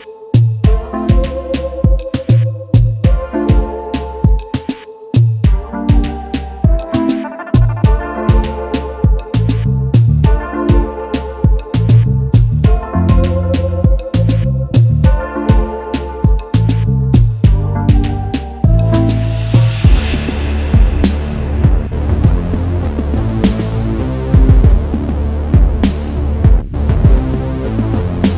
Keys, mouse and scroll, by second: 1.6 double click, 12.7 alt+click, 15.0 double click, 16.1 double click, 16.4 ctrl+x, 16.7 ctrl+f, 17.8 double click, 21.7 typing, 23.3 typing.